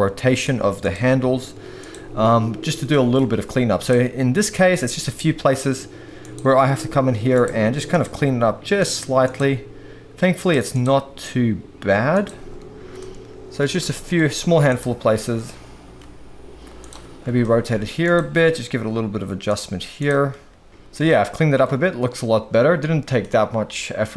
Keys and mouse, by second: 0.3 click, 1.1 g, 1.7 click, 2.9 middle click, 3.7 click, 5.1 g, 6.2 click, 6.7 r, 7.9 click, 8.2 g, 8.8 click, 9.2 click, 9.5 g, 10.7 click, 10.9 g, 12.1 click, 13.0 shift+middle click, 13.9 shift+middle click, 16.0 r, 17.4 shift+middle click, 18.0 click, 18.4 r, 20.0 click, 20.3 r, 20.9 alt+a, 20.9 r, 21.1 shift+middle click, 23.2-24.1 middle drag.